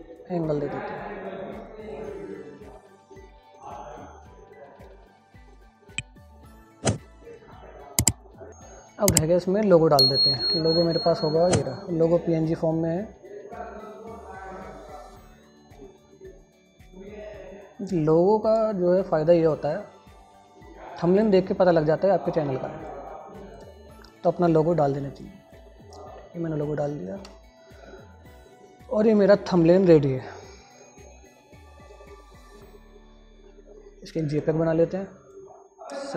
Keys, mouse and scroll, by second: 2.9 scroll up 1, 3.0-4.1 drag, 4.1-4.5 scroll down 1, 4.5 scroll up 1, 4.6 click, 4.9 alt+z, 5.0 click, 5.6-7.7 alt+drag, 7.7 click, 8.4 F4, 10.7 super+d, 11.3 click, 13.5-15.7 drag, 15.7 scroll down 1, 17.0-18.2 scroll up 1, 18.2 click, 19.3 scroll up 1, 21.1 click, 22.1 scroll up 1, 23.2-25.6 drag, 27.5 F4, 35.0 scroll down 1, 35.7-36.1 drag.